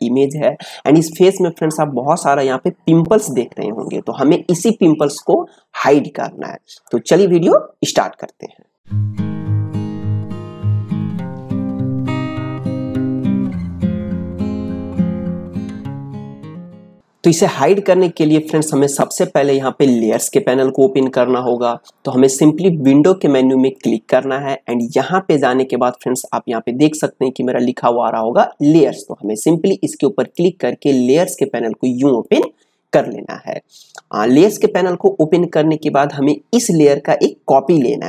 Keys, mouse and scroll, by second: 17.0 ctrl+space, 24.8 click, 30.3-34.4 drag.